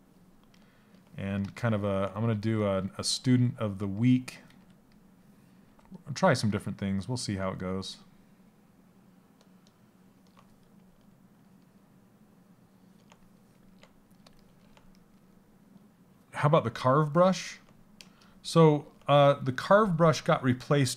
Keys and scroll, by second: 2.8 a, 4.0 a.